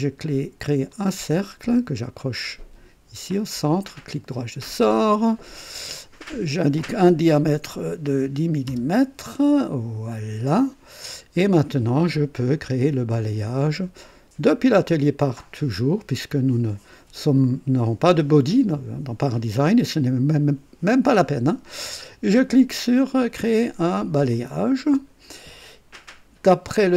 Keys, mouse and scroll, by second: 0.9 click, 2.3 click, 3.8 right click, 4.9 click, 6.2 click, 7.7 KP_1, 8.0 KP_0, 8.7 Return, 8.9 Return, 10.1 click, 17.3 click, 24.3 click, 26.5 click.